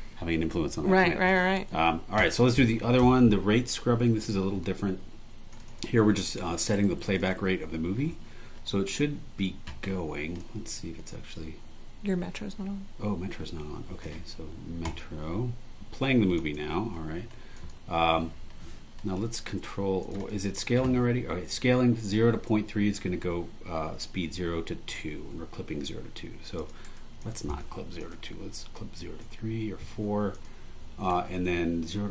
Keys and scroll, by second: 1.5 super+e, 3.0 BackSpace, 6.7 super+e, 26.8 super+e, 30.0 4.